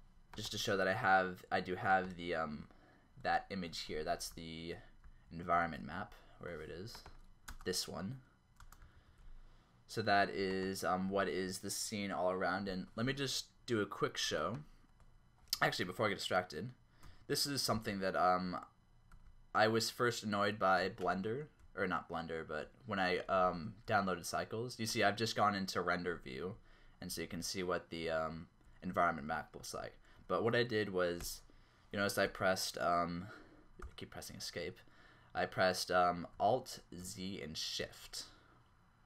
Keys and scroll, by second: 4.1 ctrl+z, 7.5 space, 8.6 space, 17.9 alt+shift+z, 19.1 alt+shift+z, 21.7 q, 23.6 shift+q, 26.7-30.0 typing, 31.4 ctrl+z, 32.3 ctrl+z, 34.0 z, 37.0 alt+z.